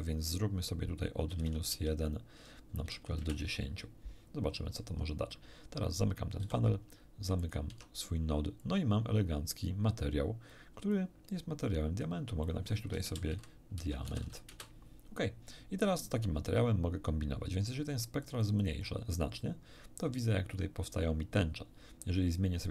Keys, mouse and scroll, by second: 1.3 -, 1.4 1, 1.7 Tab, 2.8 1, 3.2 Return, 3.2 0, 6.4 n, 7.4 click, 7.7 Tab, 8.6-9.8 drag, 10.5 click, 11.6 click, 12.4 click, 13.0-14.5 typing, 14.5 Return, 18.2 click, 22.6 click.